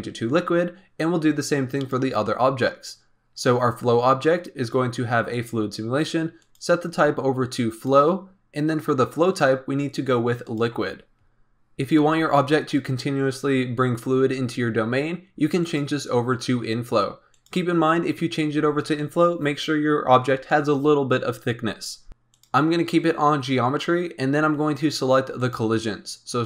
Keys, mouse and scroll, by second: 1.7 click, 5.3-11.5 drag, 15.6-18.6 drag, 22.1-24.4 drag, 25.3 click.